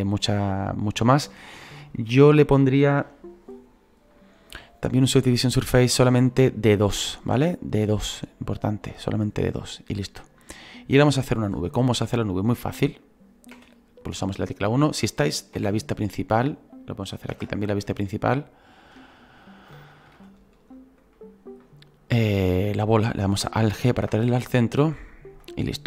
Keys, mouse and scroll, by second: 5.0 scroll up 2, 6.2-13.5 drag, 13.5 KP_1, 15.5 /, 17.5 KP_0, 17.8 KP_1, 20.2-23.9 shift+middle drag, 23.9 alt+g, 24.9-25.8 drag.